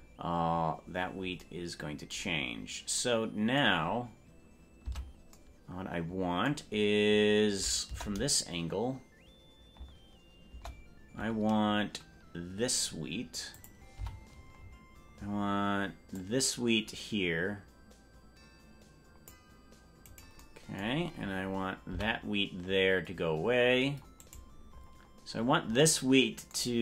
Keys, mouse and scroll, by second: 5.1 Tab, 7.9 KP_0, 9.9 KP_0, 10.7 KP_0, 13.5 click, 14.1 c, 20.9 scroll down 2, 21.1-21.5 scroll down 7, 21.3 scroll up 1, 21.9 c, 24.7-25.1 scroll up 6, 25.5 scroll up 1.